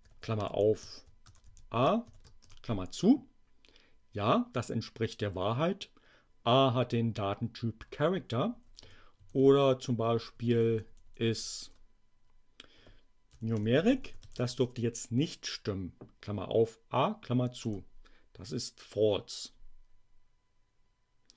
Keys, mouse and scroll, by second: 0.0-2.1 typing, 2.4 shift+Return, 8.3 Up, 8.8 Left, 10.1 BackSpace, 13.0-14.8 typing, 17.6 Return.